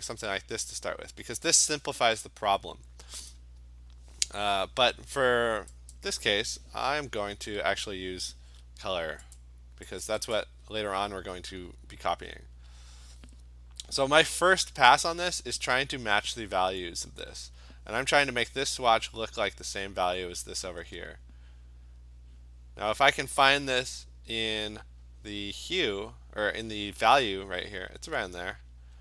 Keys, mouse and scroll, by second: 3.3 click, 5.9 click, 7.3 ctrl+z, 9.4 click, 10.0 click, 10.4 click, 12.9 click, 14.0 click, 15.6 click, 16.3 click, 17.5 click, 22.3 click, 28.1 click.